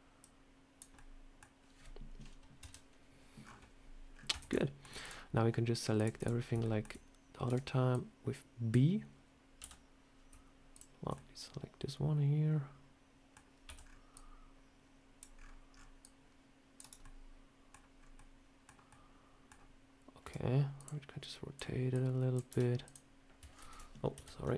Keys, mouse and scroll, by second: 0.1 click, 0.8 middle click, 2.5 KP_3, 4.0 scroll up 4, 4.2 Tab, 4.4 shift+middle click, 4.9 click, 5.8 click, 6.0 click, 6.3 scroll up 2, 6.5 shift+middle click, 7.3 b, 9.5 v, 10.6 shift+click, 11.0 middle click, 13.5 c, 16.9 middle click, 17.8 scroll up 2, 18.0 middle click, 18.7 middle click, 20.1 r, 21.1 click, 21.8 click, 22.3 r, 23.5 ctrl+z, 24.0 KP_1.